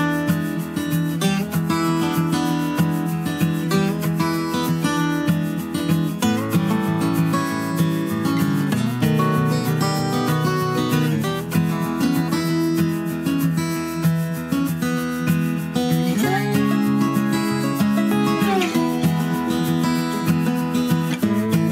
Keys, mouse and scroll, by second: 2.1 x, 3.9 s, 6.1 click, 7.3-8.7 middle drag, 8.7 KP_1, 9.3 KP_3, 13.4 F3, 18.1 s.